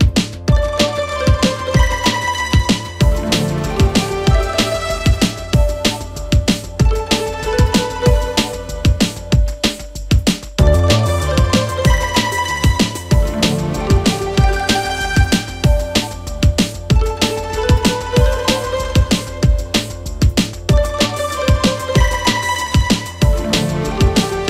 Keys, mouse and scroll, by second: 0.1-1.6 middle drag, 1.6 ctrl+r, 3.6 KP_3, 4.1-4.9 scroll up 2, 4.9 click, 8.4-8.9 scroll down 1, 8.9-10.4 scroll up 1, 10.4 click, 12.2 1, 12.8 click, 13.6 click, 14.5 click, 15.8 ctrl+KP_1, 17.7 click, 18.8 click, 19.4 click, 20.7 click, 21.2 click, 22.8 click, 23.9 click.